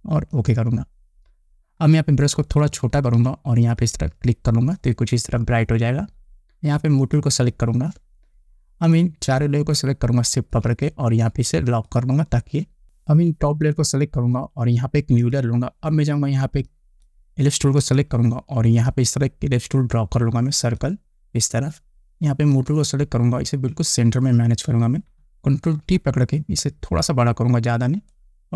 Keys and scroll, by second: 2.9 [, 26.2 ctrl+t.